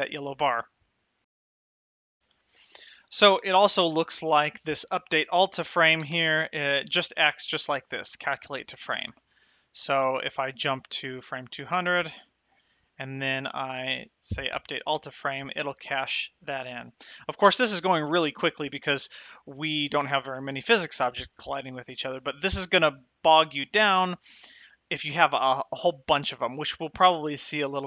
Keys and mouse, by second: 1.7 right click, 2.3 space, 6.2 space, 10.9 click, 12.7 Left, 14.7 click.